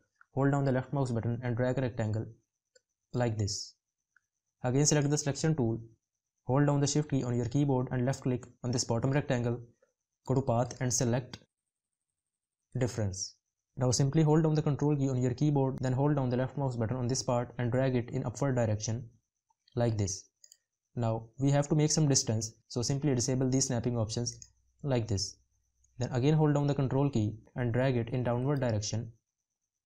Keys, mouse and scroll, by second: 6.6 shift+click, 15.0 ctrl+click, 26.7 ctrl+click.